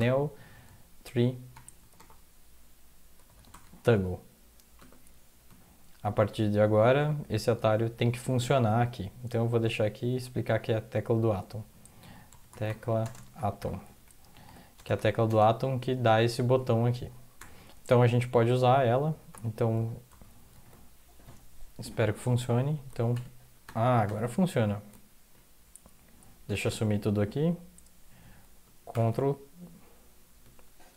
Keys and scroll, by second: 0.5-4.1 typing, 5.5 End, 9.6 typing, 12.8-15.2 typing, 14.3 ctrl+Left, 14.9 Left, 15.1 Left, 17.1-17.9 typing, 19.3 typing, 23.1 ctrl+e, 23.6 ctrl+\, 24.0 ctrl+\, 24.0 typing, 28.9 ctrl+\.